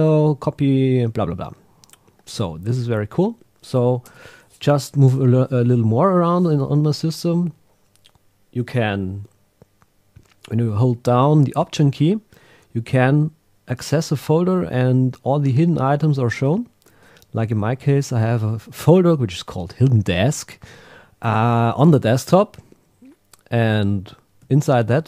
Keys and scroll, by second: 16.4 alt+Right, 24.6 Right.